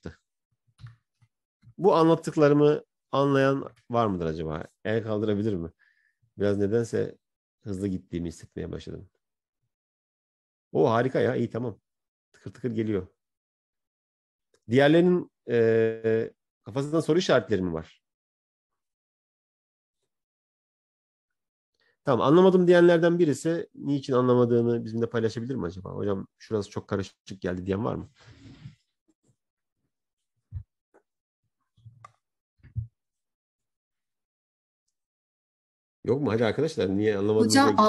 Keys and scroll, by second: 5.8 ctrl+-.